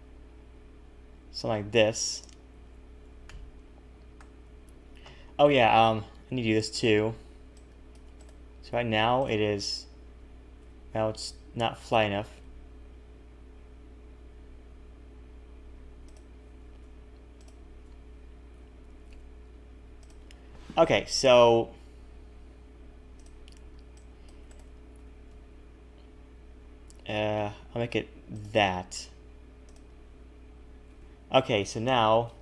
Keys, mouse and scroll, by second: 2.5 a, 2.6 a, 3.2 shift+middle click, 6.7 click, 7.2 b, 7.9 b, 9.2 click, 10.6 r, 12.2 g, 17.4 alt+shift+click, 18.5 g, 20.2 a, 20.3 a, 23.2 click, 23.6 b, 24.3 b, 25.1 s, 29.7 click, 30.9 a, 31.0 a.